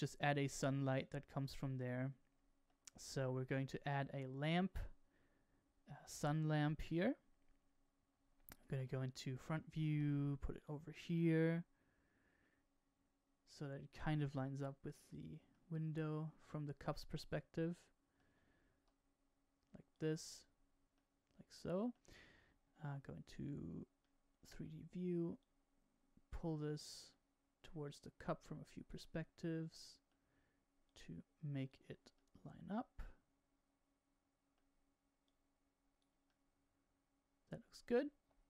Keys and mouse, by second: 1.3-2.6 middle drag, 8.7 KP_1, 9.8 g, 11.2-14.1 middle drag, 14.4 g, 15.4-17.6 middle drag, 17.6 click, 17.7 middle click, 18.7 g, 20.9-21.9 middle drag, 22.8 KP_1, 23.9 middle click, 24.0 right click, 24.5 middle click, 25.4 click, 26.4 middle click, 27.7-28.9 drag, 29.0-30.1 middle drag, 30.9 click, 32.1-35.2 middle drag, 35.2 click, 36.2-38.4 middle drag.